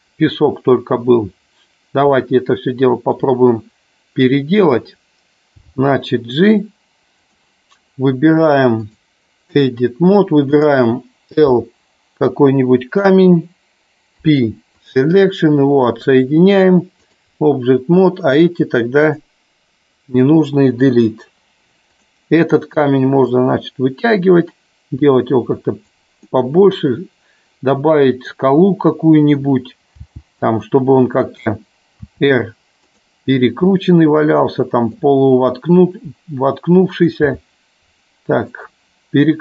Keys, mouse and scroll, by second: 2.4 middle click, 8.8 click, 10.7 click, 16.7 click, 19.2 click, 21.1 Delete, 23.3-26.0 drag, 26.5-28.6 middle drag, 32.2 r, 33.9-35.2 middle drag.